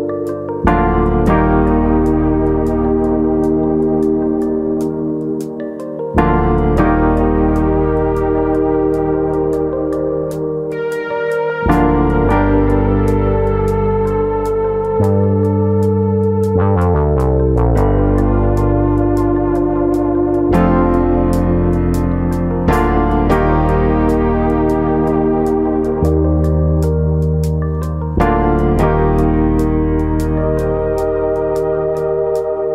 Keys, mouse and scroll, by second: 0.2 click, 1.4 middle click, 2.8 click, 3.1 ctrl+click, 3.4-3.8 scroll down 1, 4.2 click, 4.2-4.8 scroll down 1, 6.0 scroll down 1, 6.2 middle click, 7.0 click, 8.0 shift+click, 8.7 ctrl+click, 9.3 click, 11.2 click, 13.9 click, 15.5 ctrl+click, 15.9 ctrl+click, 15.9 middle click, 16.8 shift+click, 17.9 ctrl+click, 18.9 shift+e, 21.6 right click, 22.7 shift+e, 25.3 click, 25.5-26.1 scroll down 3, 25.7 middle click, 26.1 Tab, 26.3 scroll down 1, 27.0 middle click, 27.0-27.4 scroll down 5, 27.4-28.2 scroll up 9, 27.7 middle click, 28.2 Tab, 28.5 middle click, 29.2 ctrl+r, 30.1 right click, 30.3 middle click, 31.3 click, 32.5 middle click.